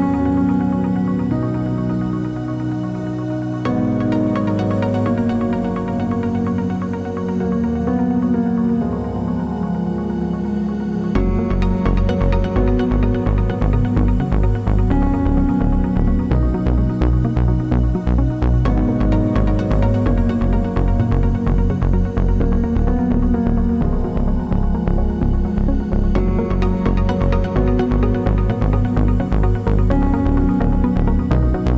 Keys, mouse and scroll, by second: 3.9 r, 12.0 click, 25.3-28.7 drag.